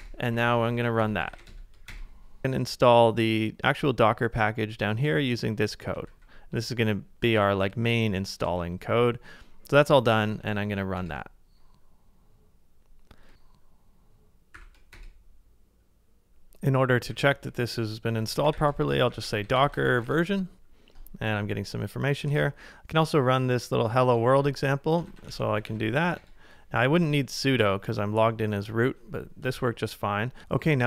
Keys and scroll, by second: 0.0-2.0 typing, 0.0 Return, 3.0 super+Tab, 7.8 super+c, 10.2 super+Tab, 12.0 super+v, 12.8 Return, 14.6 shift+y, 17.9-19.9 typing, 22.3 super+Tab, 22.4 typing, 25.1 super+c, 25.3 super+Tab, 25.6 super+v, 26.2 Return, 29.6 ctrl+a.